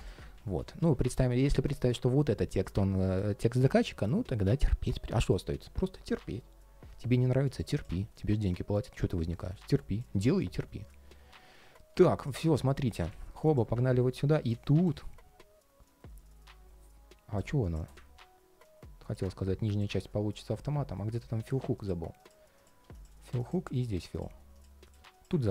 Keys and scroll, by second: 12.5 alt+i, 12.8 super+s.